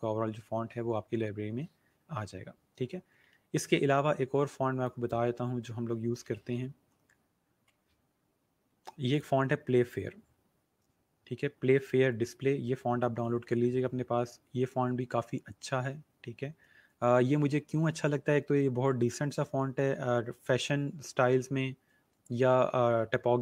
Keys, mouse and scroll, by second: 4.8 click, 5.7-7.4 typing, 9.1 click, 13.8 scroll down 1, 15.3 scroll up 1, 18.1 scroll down 1, 22.6 scroll down 1.